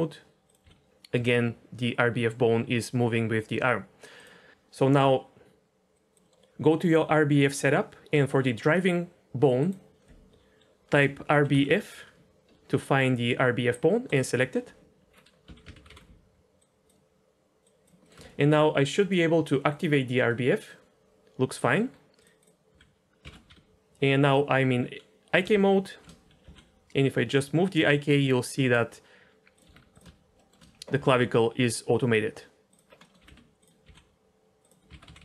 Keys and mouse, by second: 0.4 click, 0.6 g, 5.9 click, 6.2 middle click, 9.6-14.1 drag, 15.4 a, 15.7 alt+r, 15.9 alt+g, 16.6 click, 17.6 click, 18.0 middle click, 18.2 shift+middle click, 20.2 middle click, 22.1 click, 22.4 click, 22.7 h, 23.2 ctrl+z, 23.5 g, 25.9 shift+h, 26.4 g, 29.6 r, 30.3 shift+middle drag, 31.0 g, 33.1 middle click, 33.2 r, 33.3 r, 33.8 g, 34.9 alt+r, 35.1 alt+g.